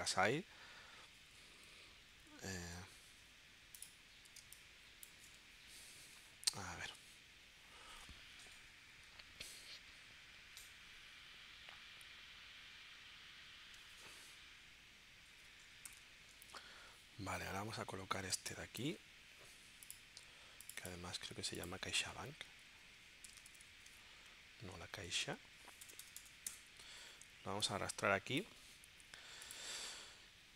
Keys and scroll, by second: 0.5 shift+Up, 2.2 Up, 4.4 space, 6.2 super+Tab, 15.9 shift+super+p, 16.4 super+Tab, 18.4 space, 22.4 Left, 23.0-24.1 typing, 25.8 BackSpace, 26.5 Return.